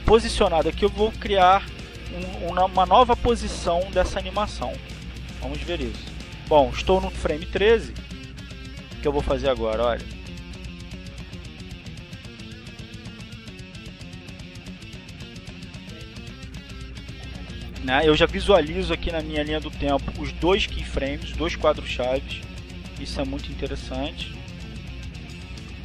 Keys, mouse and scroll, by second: 8.2 click, 8.6 click, 11.7-15.1 drag, 17.1-21.0 drag, 21.7-23.4 drag.